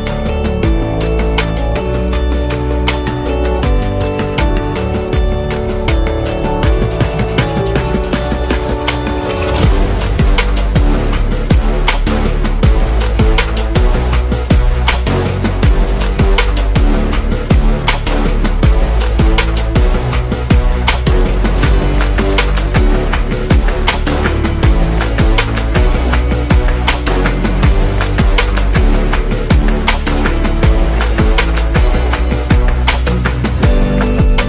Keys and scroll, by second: 0.2 space, 2.7 space, 3.8 z, 4.5 v, 19.4 super+g, 25.2-26.2 typing, 30.2 super+-, 32.5 z, 33.7 v.